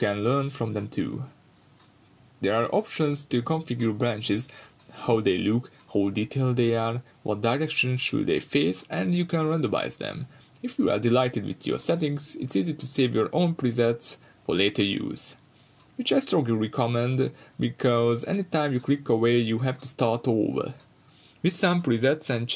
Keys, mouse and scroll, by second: 0.4 scroll up 1, 0.8-22.5 drag, 1.9 scroll up 1, 6.7-7.3 scroll down 2, 7.3 scroll down 1, 16.6-17.4 scroll down 2, 22.0 scroll down 2, 22.2-22.5 scroll up 2.